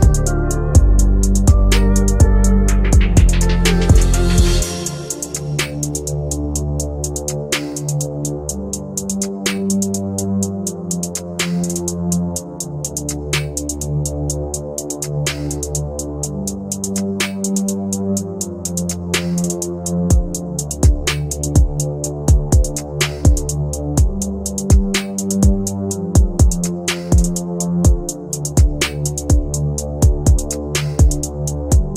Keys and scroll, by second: 2.8 F3, 9.0 shift+Page_Up, 13.7 shift+F2, 14.0 Escape, 14.5 F3, 16.3 shift+F2, 16.6 Escape, 18.4 F3, 22.0 t, 22.3 r, 22.4 a, 22.7 v, 23.9 l, 24.4 s, 24.6 space.